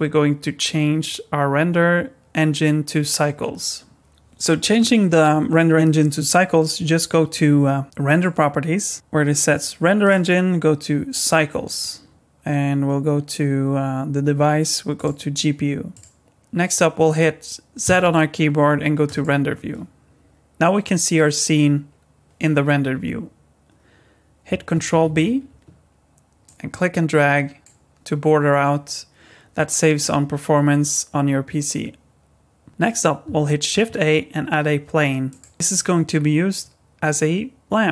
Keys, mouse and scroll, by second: 8.1 click, 10.0 click, 14.9 click, 17.8 z, 25.0 ctrl+b, 33.7 shift+a.